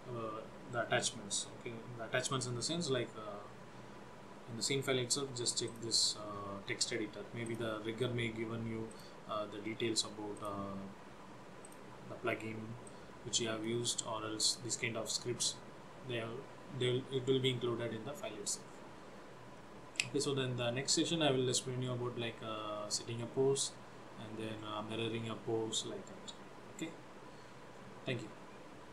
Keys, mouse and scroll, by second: 6.2 click, 7.9 click, 9.6 click, 11.8 click, 13.0 click.